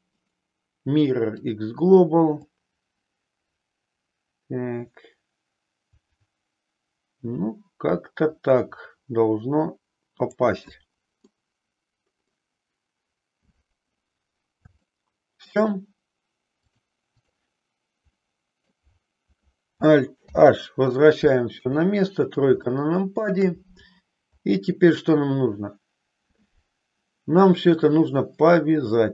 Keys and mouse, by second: 2.3-10.2 drag, 11.2-12.2 middle drag, 14.8 shift+middle click, 16.6 click, 18.1 middle click, 20.2 alt+h, 21.4 KP_3, 22.6 shift+middle click.